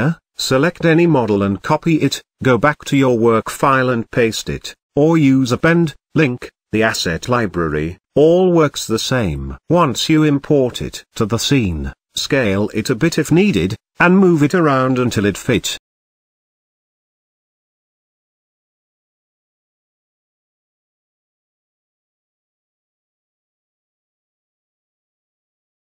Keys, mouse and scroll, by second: 0.9 click, 1.2-2.0 right drag, 2.0 click, 2.1-3.9 drag, 4.5 ctrl+v, 5.2 KP_7, 5.5-6.2 scroll down 4, 5.7 z, 6.2-6.5 shift+middle drag, 6.5-6.8 scroll up 2, 6.8 g, 8.1-8.6 scroll up 2, 8.6 shift+middle click, 8.8 shift+scroll up 1, 9.1 s, 9.9 s, 11.7 g, 13.5 KP_1, 14.1 shift+middle drag, 14.3-14.7 scroll up 8, 14.7 shift+middle click, 15.2 g, 16.8 KP_0, 17.3-18.0 scroll down 3, 18.0 g, 19.4 click, 19.9 z, 20.6 g, 23.5 click, 24.2-25.6 right drag, 25.6 g.